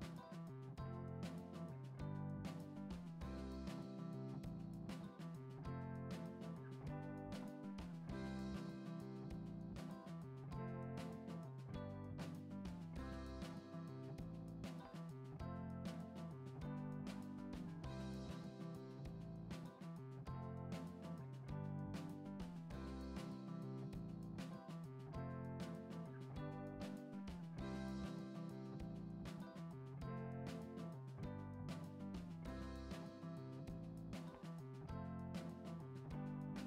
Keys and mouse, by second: 3.2 ctrl+Tab, 3.7 click, 4.3 middle click, 5.0 F6, 5.1 middle drag, 5.9 Tab, 6.4 click, 8.2 shift+click, 8.8 shift+click, 9.3 shift+click, 9.8-11.0 middle drag, 11.6 shift+middle click, 12.0 e, 17.0 shift+middle click, 17.3 middle drag, 18.0-18.6 middle drag, 19.4 KP_1, 20.6 shift+middle drag, 21.2 g, 22.9 e, 26.0 g, 26.8 middle click, 28.2 middle click, 28.6 e, 30.5-30.8 middle drag, 31.1 shift+middle drag, 31.6 middle click, 32.5 middle click, 32.9 middle click, 33.3 Tab, 34.0 middle click, 34.6 middle click, 35.3 g.